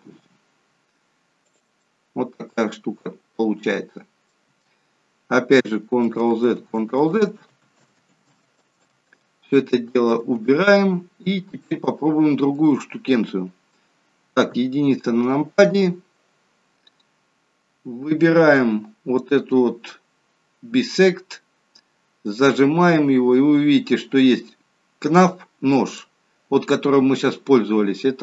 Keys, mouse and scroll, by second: 1.8 middle click, 5.9 ctrl+z, 6.4 ctrl+z, 7.4 ctrl+z, 7.9 ctrl+z, 8.9 ctrl+z, 9.6 ctrl+z, 10.1 ctrl+z, 11.6 middle click, 14.5 KP_1, 17.3-17.7 scroll down 2, 22.5 click.